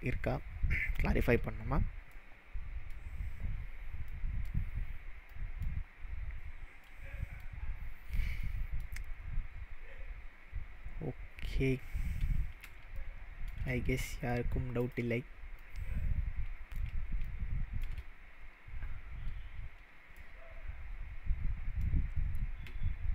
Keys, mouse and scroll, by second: 2.1-3.0 middle drag, 5.5-5.8 middle drag, 7.1 middle drag, 8.6 middle click, 11.1 middle click, 11.7-12.9 scroll down 4, 12.9-13.5 shift+middle drag, 14.8 click, 15.6-16.8 middle drag, 18.1-18.8 scroll up 3, 18.8-19.6 scroll up 2, 20.2-22.0 middle drag.